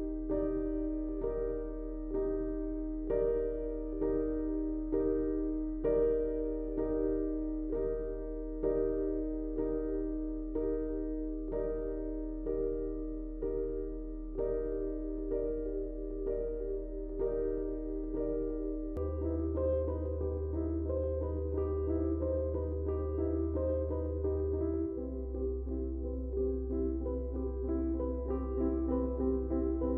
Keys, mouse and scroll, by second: 5.3 space, 5.4 click, 5.8 space, 7.0 click, 9.5 click, 14.2 click, 16.5 Tab, 20.0 Tab, 22.1 click, 28.4 Tab.